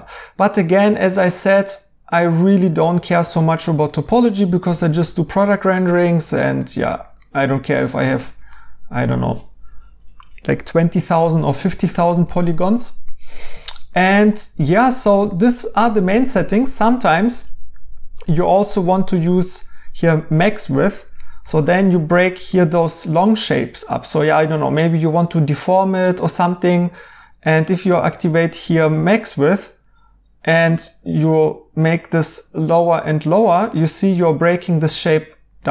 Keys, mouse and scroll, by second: 2.0 right click, 7.0 right click, 11.5 right click, 20.9 right click, 33.1 right click.